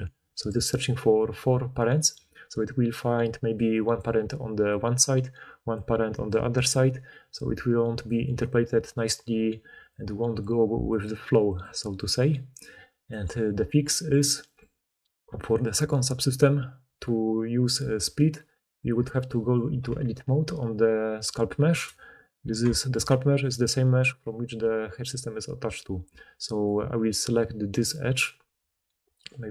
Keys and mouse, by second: 2.1-9.7 typing, 3.1-5.1 drag, 3.5-5.1 middle drag, 3.5-5.1 right drag, 8.8 click, 12.0 d, 12.1 d, 13.0 d, 19.8 Tab, 22.3-26.6 middle drag, 26.6-29.5 alt+drag.